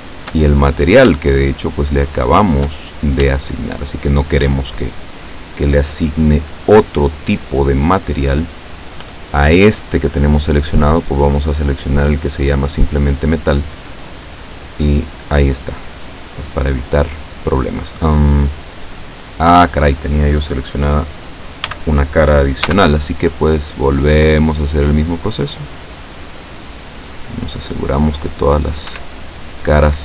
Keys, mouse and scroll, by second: 0.5 shift+middle click, 1.5 shift+right click, 2.2 shift+right click, 2.7 shift+middle click, 3.7 shift+right click, 4.1 shift+right click, 4.7-7.5 shift+middle drag, 7.7-8.1 scroll down 2, 11.1 click, 12.9 click, 15.7-16.2 scroll up 1, 16.2 scroll up 1, 18.8-20.0 middle drag, 21.7 a, 22.6 c, 23.3-23.8 scroll down 2, 23.8 scroll up 2, 24.7-28.0 drag, 28.1 middle click, 28.9 Escape, 29.1-30.0 middle drag.